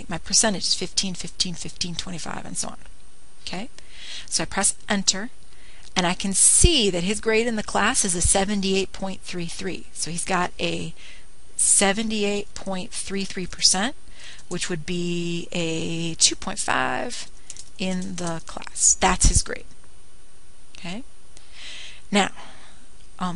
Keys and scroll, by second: 6.4 Return.